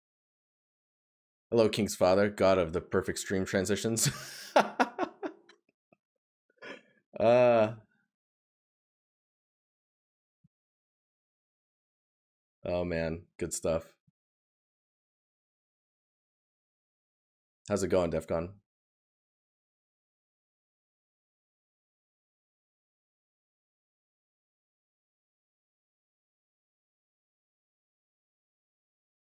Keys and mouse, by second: 10.5 right click, 15.5 right click, 20.3 right click, 23.1 right click, 26.9 right click.